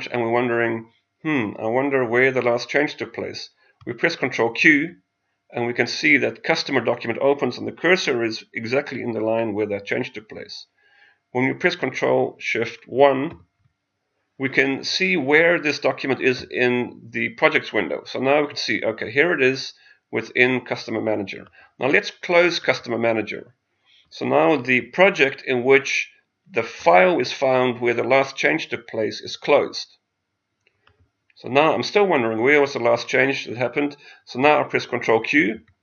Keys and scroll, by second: 4.6 ctrl+q, 13.3 ctrl+shift+1, 35.4 ctrl+q.